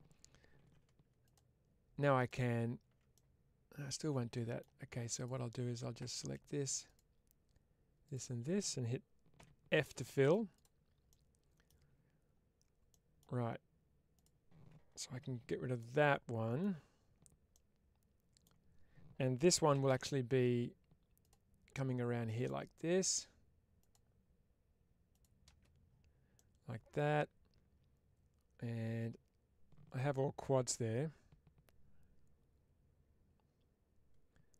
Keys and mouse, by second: 0.5 2, 3.0-4.4 middle drag, 5.0 click, 9.3 f, 9.8 middle click, 10.4 click, 10.9 middle click, 12.8 middle click, 14.0 click, 15.1 ctrl+x, 15.6 middle click, 17.4 middle click, 26.2-34.5 middle drag.